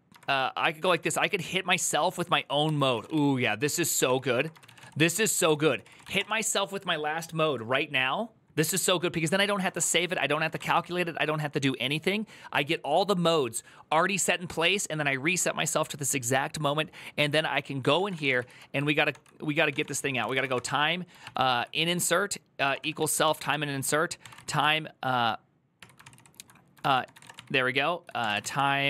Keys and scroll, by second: 0.0-6.4 typing, 9.1 ctrl+c, 9.2-11.0 typing, 17.7-28.8 typing, 18.9 ctrl+d, 21.0 ctrl+n, 25.6 Tab.